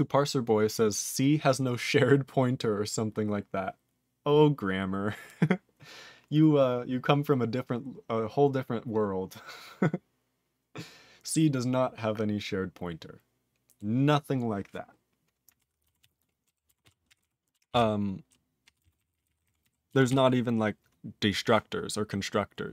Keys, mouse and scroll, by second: 15.6 ctrl+p, 16.0 ctrl+s, 16.4 ctrl+k, 17.1 ctrl+e, 17.2 ctrl+n, 17.7 ctrl+s, 18.0 ctrl+n, 18.3 ctrl+n, 18.6 ctrl+p, 18.8 ctrl+space, 18.8 ctrl+n, 19.0 ctrl+n, 19.3 ctrl+e, 19.4 ctrl+n, 19.4 ctrl+e, 19.6 ctrl+g, 20.1 ctrl+s.